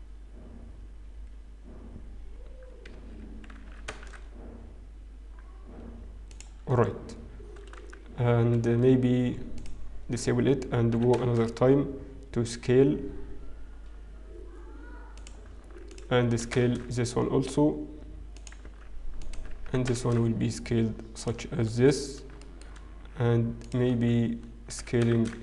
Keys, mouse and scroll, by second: 3.9 s, 9.4-11.2 scroll down 3, 11.2 click, 11.2-12.4 scroll up 1, 11.2 s, 16.9 alt+click, 16.9 s, 21.5-22.8 scroll down 4, 22.8 shift+middle click, 22.8-23.5 scroll up 3, 23.6 alt+click, 24.0-25.3 scroll down 1, 25.3-25.4 scroll up 1, 25.3 s.